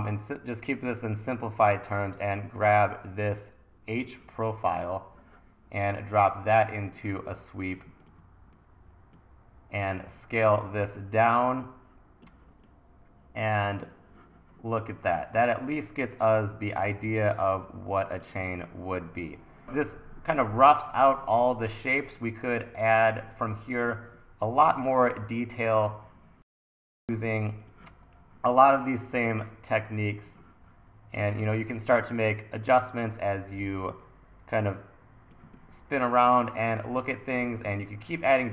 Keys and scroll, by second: 10.4 t, 15.3 e, 29.2 t, 30.6 super+z, 31.4 t, 33.1 e, 37.7 1.